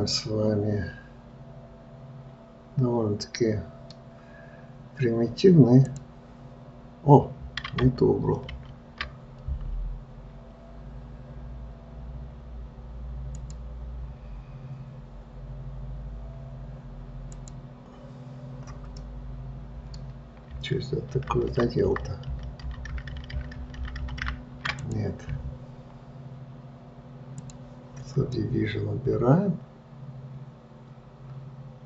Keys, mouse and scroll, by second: 6.2-8.9 drag, 8.9 ctrl+z, 13.6 click, 17.6 click, 19.3-21.5 middle drag, 21.5 ctrl+z, 21.9-23.5 ctrl+z, 25.1 click, 27.6-28.7 drag, 28.7-31.7 middle drag.